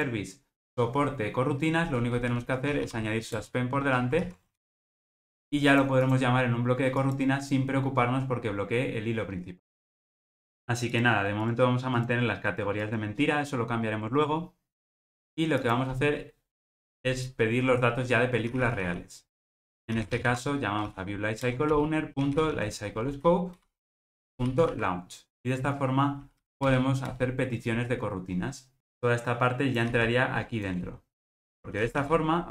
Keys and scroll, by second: 3.3 Return, 21.5 Return, 29.9 super+x.